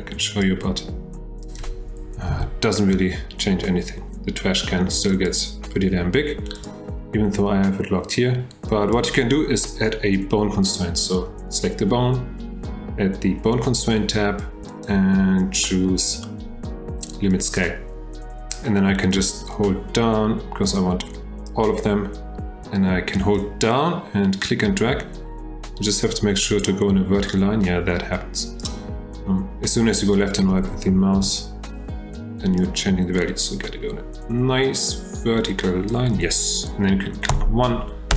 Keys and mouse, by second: 1.4 click, 2.3 g, 6.5 click, 8.1-9.0 drag, 14.8-17.5 drag, 19.1-21.7 drag, 23.5-28.7 drag, 31.1 F8, 32.7-38.1 drag.